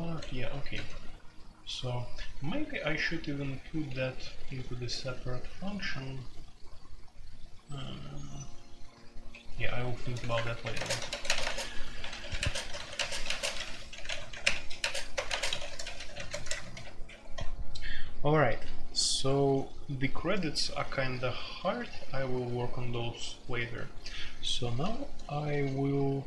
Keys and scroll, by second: 0.0-0.8 typing, 3.3-4.7 typing, 8.9-19.7 typing, 10.3 Return, 22.0-26.2 typing.